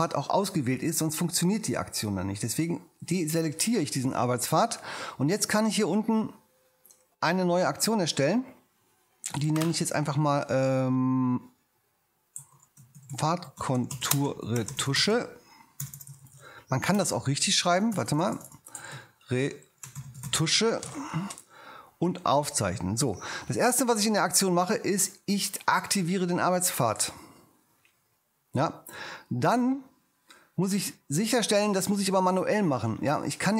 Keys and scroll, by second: 12.1-15.6 typing, 16.9 BackSpace, 18.9-20.9 typing.